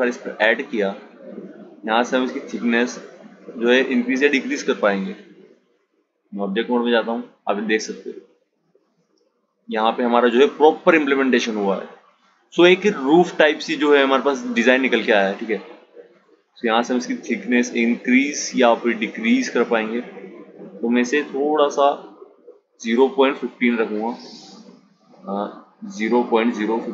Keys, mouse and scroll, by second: 0.9-4.0 drag, 4.6-7.6 drag, 7.8 click, 15.8-18.9 drag, 23.8-26.9 drag.